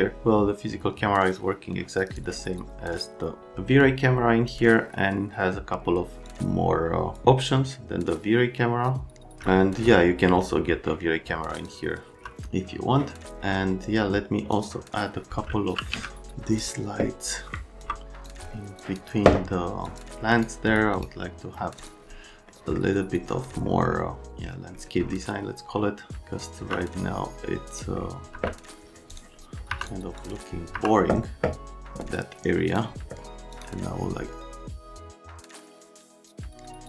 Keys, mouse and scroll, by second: 0.2 click, 3.8 click, 6.2 click, 7.1 click, 9.0 click, 11.5 click, 12.1 F3, 14.5 click, 15.6 e, 15.9 z, 17.5 click, 17.9 click, 18.8 click, 19.8 click, 20.3 click, 20.7 click, 21.0 right click, 21.8 click, 22.5 middle click, 26.1 click, 28.3 F3, 30.7 F3, 32.7 click, 33.5 click, 34.4 click, 34.7 middle click, 35.2 click, 35.7 middle click, 36.1 click, 36.4 middle click.